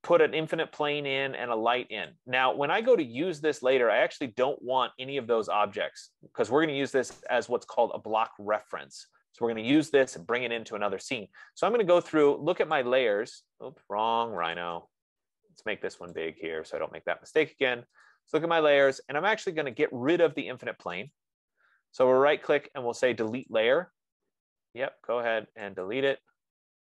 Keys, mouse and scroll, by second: 1.1 click, 3.5 click, 4.3 click, 5.7 click, 9.1 F15, 9.6 scroll, 13.4 click, 15.2 click, 16.9 click, 18.4 click, 20.2 click, 21.6 right click, 24.0 click, 26.1 click.